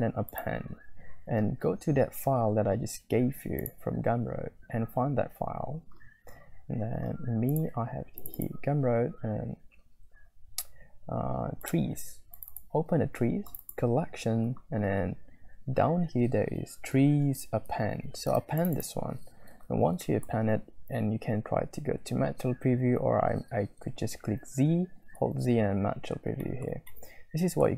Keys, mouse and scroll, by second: 20.1 click, 24.5 z, 26.6 shift+middle click, 26.9 click, 27.1 middle click, 27.2 click, 27.3 middle click, 27.5 middle click.